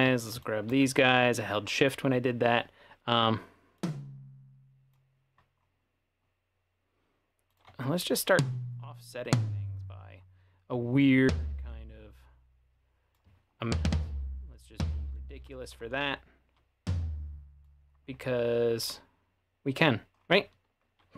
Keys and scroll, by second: 15.4 Delete.